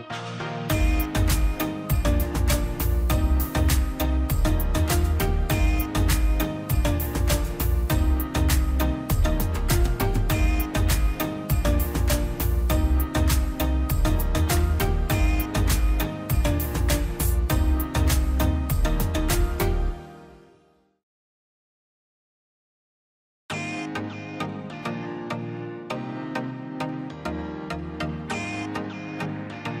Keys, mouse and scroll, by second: 1.1 ctrl+z, 1.9 click, 2.0 scroll down 1, 2.2 middle click, 2.6-3.0 scroll up 1, 3.0-6.2 drag, 6.2 ctrl+z, 6.5-7.8 drag, 7.8 scroll down 1, 8.1 middle click, 8.6 click, 9.2 scroll up 1, 10.5 ctrl+click, 11.8-12.1 ctrl+scroll up 2, 12.4 scroll down 1, 12.6 scroll up 1, 13.4 click, 14.7 scroll down 1, 17.3 click, 21.1 Delete, 21.3 scroll down 1, 21.7 middle click, 22.0 scroll down 1, 22.4 click, 25.9 scroll down 1, 26.9 click.